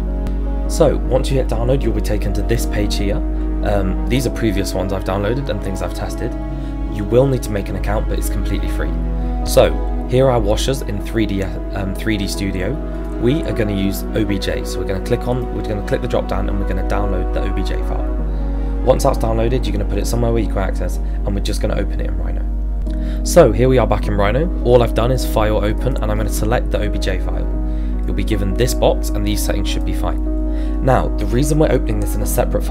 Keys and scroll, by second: 18.3 Return, 27.1 z.